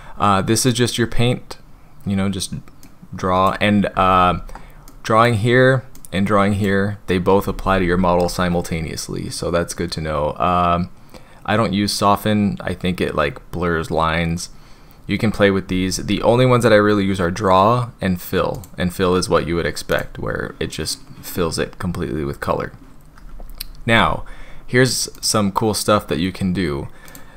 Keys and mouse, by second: 2.8-3.5 drag, 4.2 ctrl+z, 4.9 click, 6.0 click, 7.6 ctrl+z, 7.9 ctrl+z, 18.5 click, 19.9 click, 25.2 click, 27.2-27.3 drag.